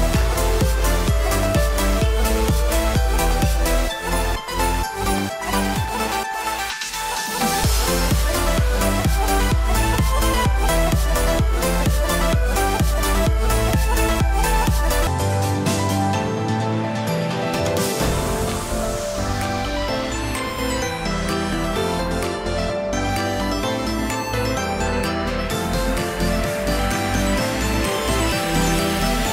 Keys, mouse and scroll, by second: 0.1 middle click, 0.7 shift+middle click, 1.0-1.4 scroll up 2, 1.9 alt+click, 2.5 KP_1, 2.9-3.3 scroll up 2, 3.1 shift+middle click, 4.3 click, 5.6 middle click, 6.3 middle click, 6.8 s, 8.6 alt+a, 8.6 scroll down 4, 8.9 middle click, 9.5 Tab, 9.8 middle click, 12.0 click, 12.6 click, 12.9-13.5 scroll down 2, 13.3 alt+a, 13.5 middle click, 15.4-16.1 scroll up 5, 15.5 shift+middle click, 15.9 shift+middle click, 16.1 middle click, 16.8 middle click, 17.4 middle click, 17.7 middle click, 18.0 scroll up 3, 18.2 shift+middle click, 18.5 click, 19.0 Tab, 19.3 shift+middle click, 19.6 scroll up 1, 19.8 middle click, 20.4 middle click, 21.6 alt+z, 23.0 alt+click, 24.2 alt+z, 24.5 middle click, 25.4 middle click, 26.7 s.